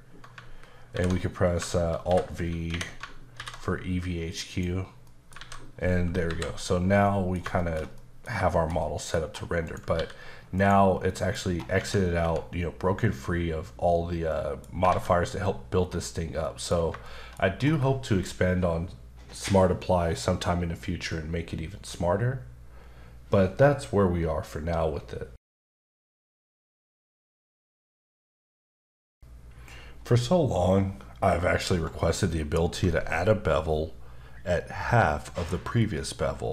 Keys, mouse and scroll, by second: 0.9 alt+m, 2.0 alt+b, 2.7 Escape, 3.4 alt+v, 4.3 click, 5.0 middle click, 5.4 alt+a, 6.3 KP_5, 7.0 middle click, 7.6 shift+middle click, 8.5 shift+middle click, 9.2 scroll up 1, 9.7 click, 9.9 g, 10.5 right click, 11.1 middle click, 11.4-11.8 scroll up 2, 11.8 Tab, 12.2 Tab, 14.3 middle click, 14.9 alt+a, 15.1-16.2 scroll down 2, 16.4 middle click, 17.0 shift+middle click, 17.3 middle click, 17.6-19.7 scroll down 1.